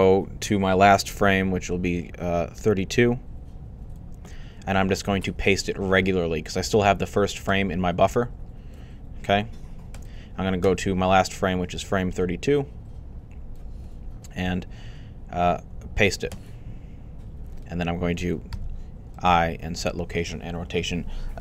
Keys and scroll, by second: 18.3 i.